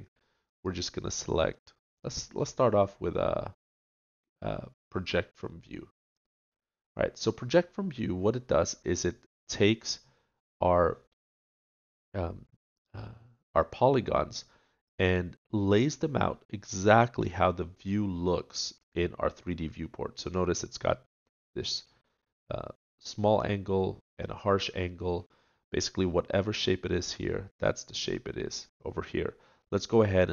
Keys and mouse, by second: 2.3 middle click.